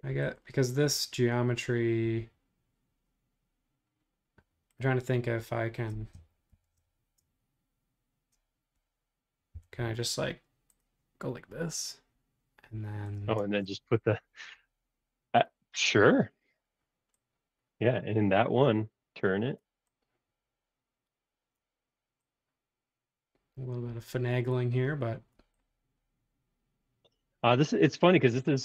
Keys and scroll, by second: 6.5 shift+g, 9.6 l, 13.4 space.